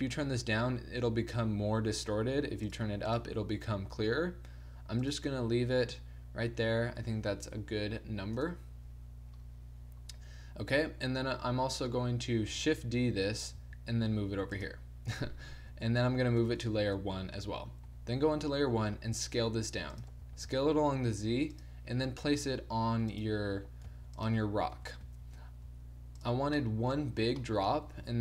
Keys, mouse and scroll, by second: 8.3 KP_0, 12.7 shift+d, 16.4 m, 17.9 1, 19.0 s, 20.2 s, 22.0 g, 23.9 s, 24.7 KP_7, 25.0 z, 25.6 g, 26.6-27.9 middle drag, 27.0 z, 27.9 r.